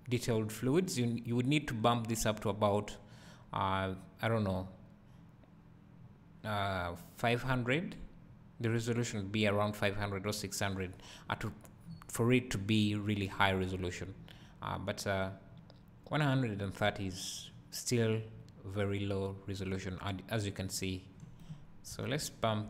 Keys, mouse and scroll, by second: 11.9 scroll up 2, 12.6 scroll down 1, 13.3 scroll up 1, 19.8 right click, 22.2 Escape.